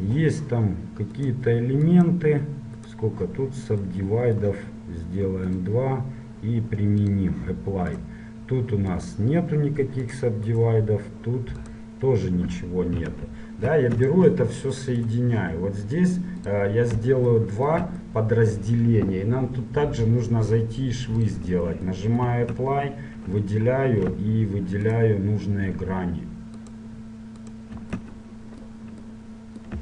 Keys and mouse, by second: 4.8 middle click, 5.7-9.1 drag, 8.1-13.7 right drag, 14.1-16.9 right drag, 16.6-18.5 drag, 21.4-23.2 drag, 22.4 Tab, 25.1-28.3 right drag, 28.3-29.8 middle drag.